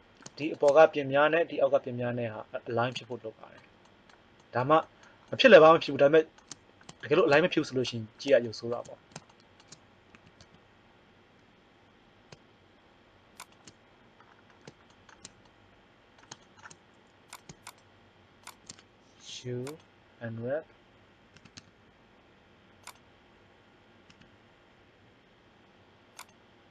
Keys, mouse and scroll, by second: 10.1 s, 13.9 middle click, 16.4 middle click, 17.3-18.4 right drag, 19.1 u, 21.3 s, 24.1 s.